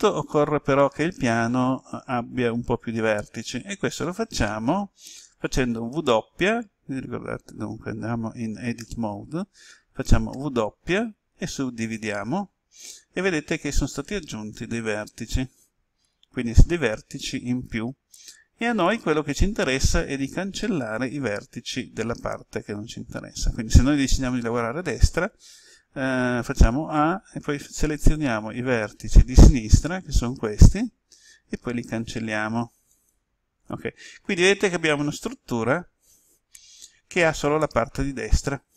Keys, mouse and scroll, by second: 5.8 w, 8.8 Tab, 10.3 w, 11.8 click, 26.6 a, 28.1-31.3 drag, 31.7 Delete, 32.8 click.